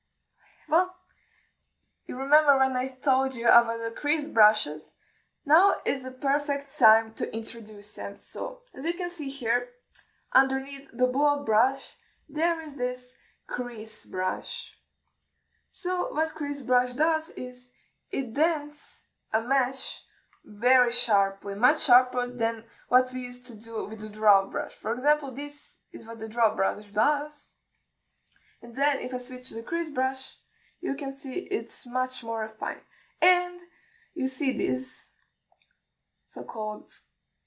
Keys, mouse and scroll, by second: 3.2-6.5 middle drag, 17.5 click, 21.9-22.9 middle drag, 23.8 click, 24.9 click, 26.3-28.0 drag, 28.7 ctrl+z, 30.4 click, 31.3-34.8 drag.